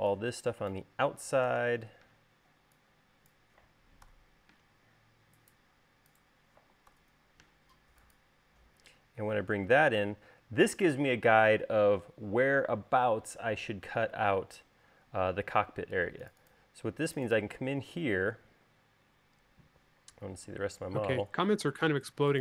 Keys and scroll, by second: 2.3 BackSpace, 4.9 BackSpace, 7.8 BackSpace, 21.2 q.